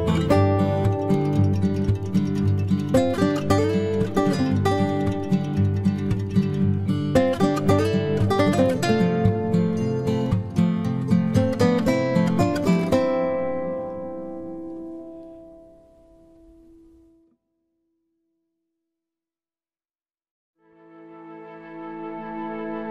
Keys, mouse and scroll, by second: 0.1 right click, 2.7 middle click, 3.4-5.1 right drag, 4.1-5.9 drag, 4.7 b, 5.9-7.9 middle drag, 6.6 b, 7.9-9.7 drag, 9.9-11.7 right drag, 10.0 g, 12.0-13.8 right drag, 12.1 g, 15.3-16.4 drag, 15.5 g, 16.2 g, 17.1 b, 17.4 g, 19.5 ctrl+r, 20.6 right click.